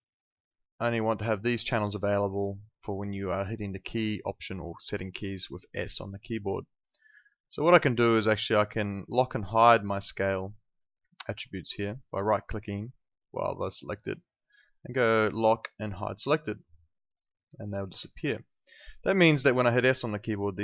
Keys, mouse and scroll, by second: 0.7 click, 8.4 click, 11.4 right click, 16.2 click.